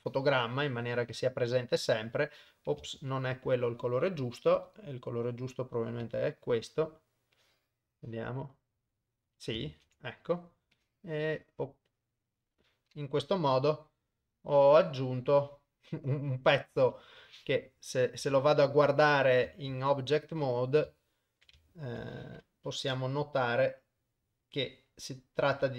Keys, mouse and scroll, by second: 0.1-1.6 drag, 3.1 ctrl+z, 4.7 click, 7.4-8.6 drag, 9.8 ctrl+z, 10.8 click, 13.9-16.6 drag, 16.9 KP_0, 17.7 middle click, 18.3 Tab, 18.8 middle drag, 19.2 middle click, 19.8 ctrl+Tab, 21.0 shift+middle click, 21.7 ctrl+middle drag, 22.7-23.9 middle drag, 24.0 ctrl+middle click, 24.2 middle click.